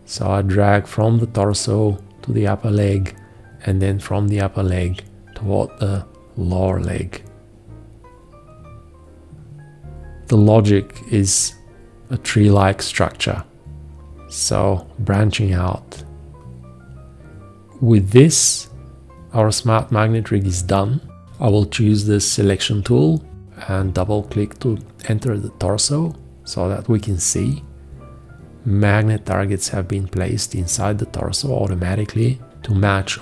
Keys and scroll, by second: 21.3 v.